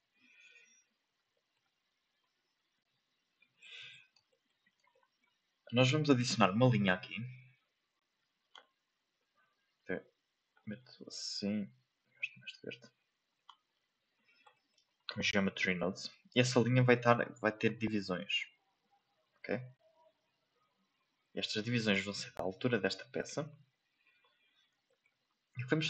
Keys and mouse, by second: 1.3 ctrl+shift+middle click, 2.2-3.3 ctrl+drag, 4.2 shift+middle click, 4.9 shift+middle click, 8.2-10.7 drag, 11.4 drag, 14.5 shift+middle click, 15.5 shift+middle click, 16.7 shift+middle click, 18.1 click, 19.2 click, 20.0 click, 21.0 click, 21.5 shift+middle click, 23.7 shift+middle click, 24.8 shift+middle click.